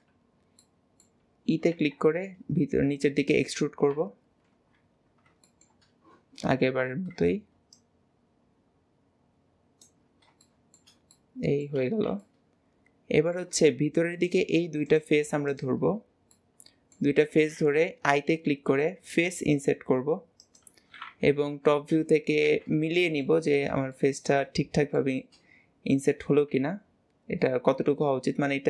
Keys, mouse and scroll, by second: 5.5-6.6 middle drag, 7.8 click, 10.2 scroll down 2, 10.5-11.9 shift+middle drag, 12.3-14.3 middle drag, 14.3 click, 14.9 click, 15.5 click, 15.9-16.3 scroll down 1, 16.3 middle click, 21.3 KP_7, 23.0 shift+middle click, 23.6-24.0 scroll up 2, 24.0 shift+middle click, 24.5-25.0 scroll up 2, 25.0-26.5 shift+middle drag, 26.5 s.